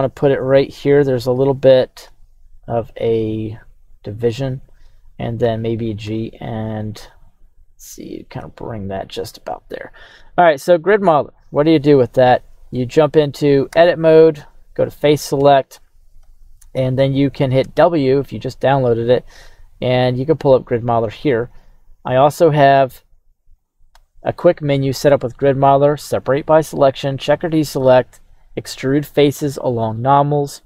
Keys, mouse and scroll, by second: 2.0 g, 4.6 click, 4.6 x, 5.4 g, 6.0 z, 8.7 click, 11.2 right click, 13.8 Tab, 14.5 right click, 15.3 Tab, 15.8 right click, 17.6 w, 22.5 right click, 23.6 right click, 24.0 q.